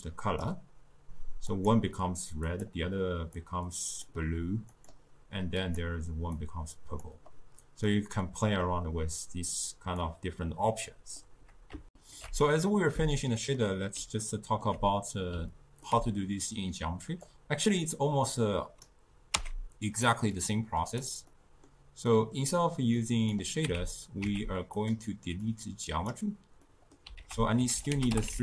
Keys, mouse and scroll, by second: 1.5 click, 2.5 click, 4.8 click, 5.7 click, 7.9-9.6 middle drag, 9.6-10.9 drag, 10.9-11.9 middle drag, 11.9 ctrl+alt+shift+q, 13.6-17.3 middle drag, 17.3-19.4 drag, 19.4 x, 20.4 click, 21.3-23.0 middle drag, 23.0 click, 23.7 z, 24.3 z, 25.5 click, 26.7 middle click, 27.2 ctrl+a.